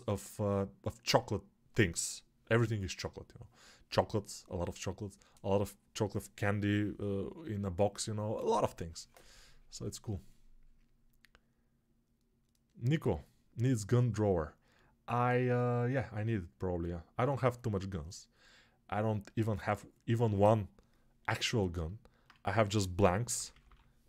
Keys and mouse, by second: 22.3 1, 22.9 [.